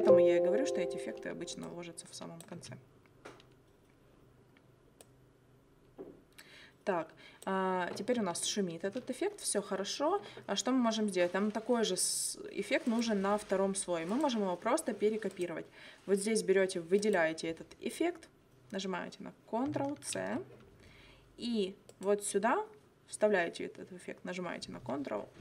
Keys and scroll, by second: 2.6 space, 8.2 space, 20.2 ctrl+c.